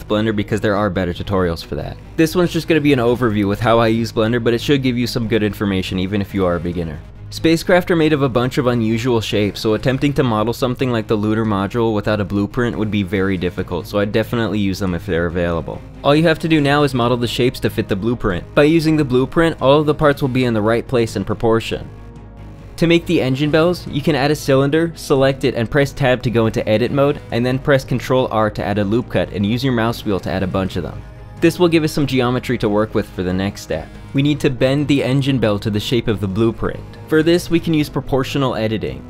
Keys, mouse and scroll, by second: 0.4 alt+click, 1.1 shift+a, 4.2 Tab, 4.3 s, 5.2 Tab, 6.5 space, 7.2 space, 7.5 click, 8.0 Tab, 8.4 `, 9.6 3, 9.9 ,, 10.2 space, 11.3 ctrl+b, 12.5 3, 13.0 e, 13.5 3, 14.5 alt+e, 15.9 Tab, 18.5 shift+s, 18.5 shift+a, 18.7 shift+a, 19.7 click, 20.2 g, 20.5 click, 20.5 Tab, 20.7 s, 21.2 Tab, 21.4 g, 21.8 shift+drag, 22.3 ctrl+click, 22.5 ctrl+l, 23.0 shift+click, 23.5 ctrl+l, 23.7-25.1 typing, 25.0 Tab, 26.3 Tab, 26.8 Tab, 26.9 z, 27.0 3, 27.2 z, 27.4 space, 28.7 ctrl+r, 32.7 click.